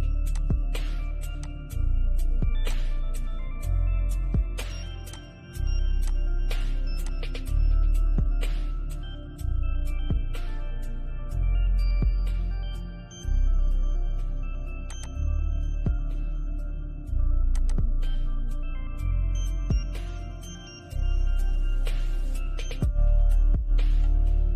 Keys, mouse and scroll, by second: 6.8-7.5 scroll up 1, 7.8 scroll down 1, 7.9 middle click, 14.1 click, 15.4-15.8 scroll down 1, 15.8 middle click, 16.7 click, 18.6 scroll up 1, 21.3-21.8 scroll down 1.